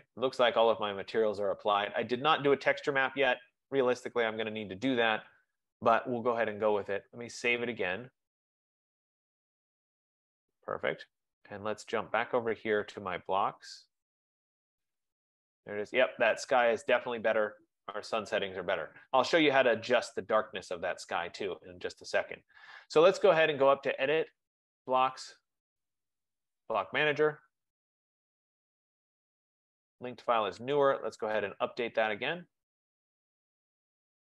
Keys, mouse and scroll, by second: 6.7-8.3 drag, 12.2 click, 14.6 click, 21.9 click, 24.7 click, 28.1 click, 32.0 click.